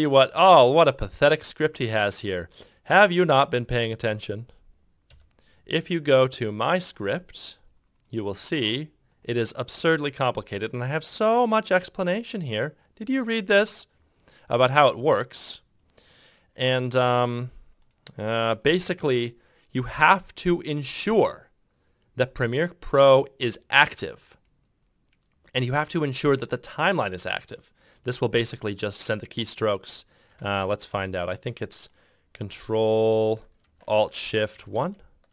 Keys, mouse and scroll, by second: 5.0 ctrl+F6, 30.8 ctrl+F3, 34.6 ctrl+alt+shift+1.